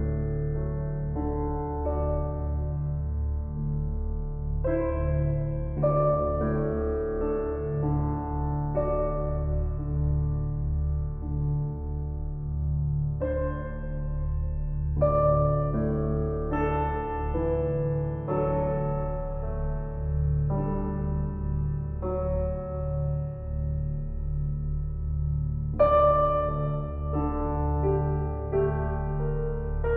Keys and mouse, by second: 0.6 click, 1.1-1.9 typing, 2.7 click, 3.2-4.3 typing, 3.7 click, 5.4 click, 6.2 click, 7.0-8.1 drag, 11.7 ctrl+alt+click, 12.7-13.8 ctrl+alt+drag, 13.8 ctrl+l, 15.0 Down, 15.2 Down, 15.5 Return, 17.1-18.1 drag, 18.5 ctrl+s, 23.4-25.0 alt+drag, 25.3 click, 25.9 click, 27.3 BackSpace, 27.5 Return.